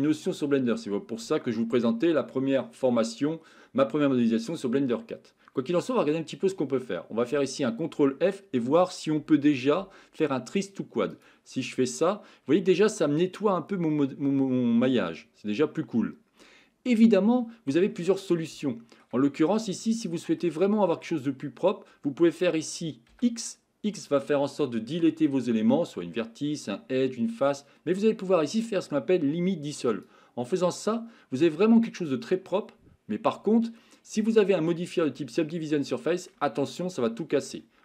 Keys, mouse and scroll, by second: 11.9-17.8 middle drag, 18.6 shift+middle click, 19.4 middle click, 20.0 shift+middle click, 20.7 middle click, 30.7-35.1 middle drag, 35.9 shift+middle click, 36.6 middle click.